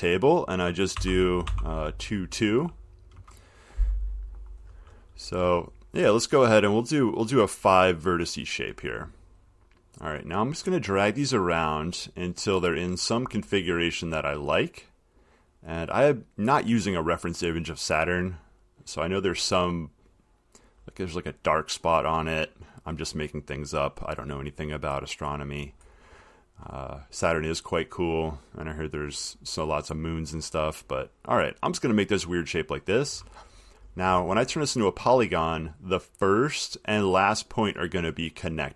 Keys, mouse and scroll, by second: 0.0 Down, 1.2-1.7 typing, 3.4 typing, 7.8 click, 8.7 click, 10.9 click, 12.2 click, 18.1 click, 19.6 click, 20.8 click, 22.2 click, 25.5 click, 29.5 click, 31.9 click, 34.5-34.8 scroll, 37.2 scroll.